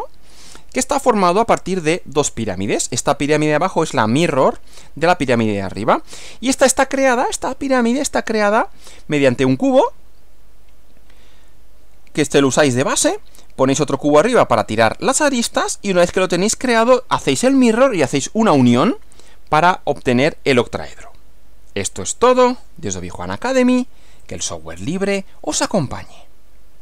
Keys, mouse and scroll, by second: 6.1 Right, 24.2 click.